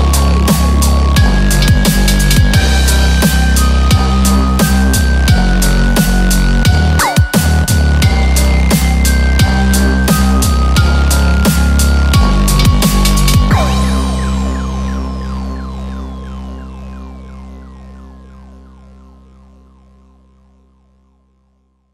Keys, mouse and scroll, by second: 1.3 scroll up 1, 1.4 scroll down 2, 2.4 shift+click, 2.9 shift+click, 3.5 shift+click, 3.7 scroll down 1, 4.0 shift+click, 4.3 shift+click, 4.6 scroll down 2, 4.9 middle click, 5.5 shift+click, 5.9 shift+click, 6.2 shift+click, 6.6 shift+click, 6.8 shift+click, 7.3 shift+click, 7.5 shift+click, 7.8 shift+click, 8.2 middle click, 9.0 shift+click, 9.3 shift+click, 9.7 shift+click, 9.9 shift+click, 10.3 middle click, 10.7 shift+click, 11.1 shift+click, 11.3 shift+click, 11.7 shift+click, 12.1 middle click, 12.7 shift+click, 13.1 shift+click, 13.7 shift+click, 14.6 KP_1, 14.9-15.4 scroll down 6, 15.4-16.1 scroll up 4, 15.7 shift+middle click, 16.5 shift+click, 18.7 shift+click, 19.3-20.1 shift+scroll up 7, 20.1-20.4 scroll down 2, 20.4 shift+scroll up 2, 20.6 shift+click, 21.3 shift+click, 21.5 shift+click.